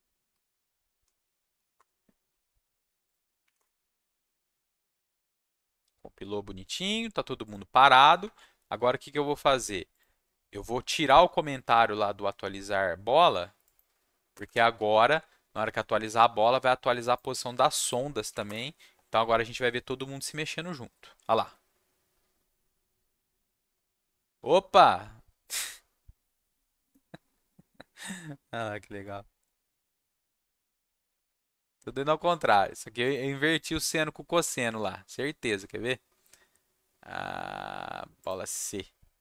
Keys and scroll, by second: 0.0-2.0 typing, 2.3 ctrl+s, 3.4 Up, 3.5 Return, 14.3 BackSpace, 14.4 BackSpace, 14.7 ctrl+s, 17.6 ctrl+shift+s, 18.3 Up, 18.4 Return.